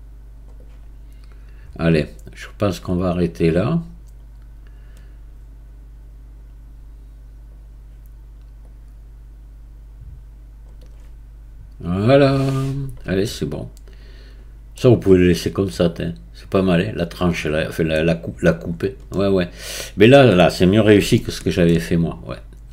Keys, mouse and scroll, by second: 0.6-3.6 right drag, 8.6-10.8 drag, 10.8-13.3 right drag, 13.3-18.6 middle drag, 18.6-19.1 scroll down 2, 19.1-21.8 middle drag, 21.8-22.7 scroll down 4.